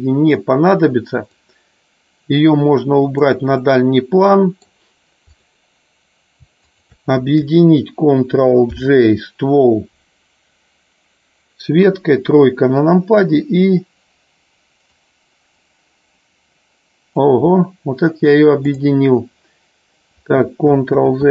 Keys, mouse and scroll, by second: 1.2-3.2 drag, 3.6-4.6 middle drag, 8.8 ctrl+j, 11.7 KP_3, 14.8-17.1 drag, 18.7 click, 21.0 ctrl+z.